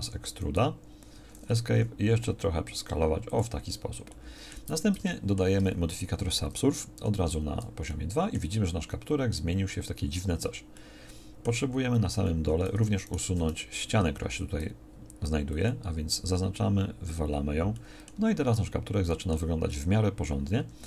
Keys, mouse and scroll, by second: 0.0 e, 1.6 s, 4.7 Tab, 7.0 ctrl+2, 10.3 Tab, 12.4 a, 14.3 x, 19.7 middle click, 20.6 Tab.